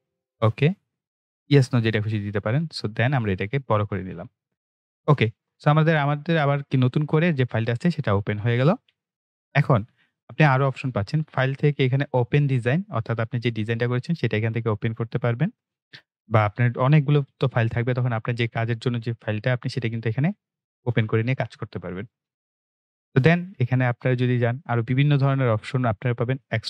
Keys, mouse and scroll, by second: 10.7 click, 22.5 click.